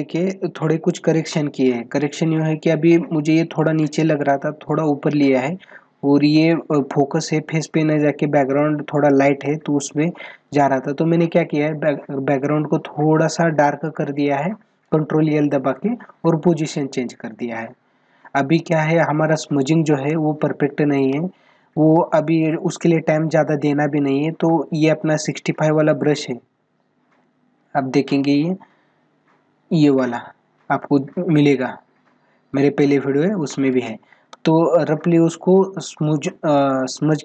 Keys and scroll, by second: 19.8 space, 33.2 space.